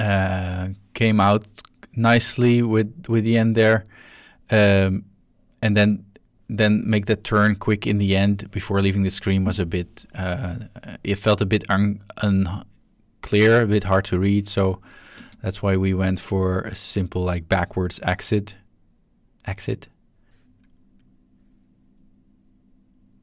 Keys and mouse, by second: 2.8-6.4 drag, 7.7-14.8 drag, 15.1 space, 20.3 space.